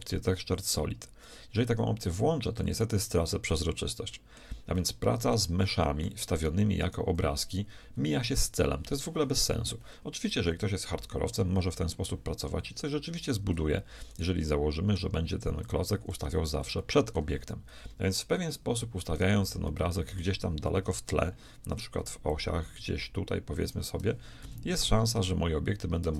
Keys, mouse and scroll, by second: 2.6-4.5 drag, 3.5 right click, 4.5-6.4 middle drag, 6.4-7.4 right drag, 7.4-8.8 drag, 7.8 z, 10.4 KP_1, 14.1-16.0 right drag, 15.6-17.6 drag, 16.3 z, 17.6-18.6 middle drag, 18.0 KP_1, 19.2-21.0 right drag, 19.8-21.4 middle drag, 21.0 KP_3, 22.3-24.1 drag, 24.2 click, 24.5 KP_1.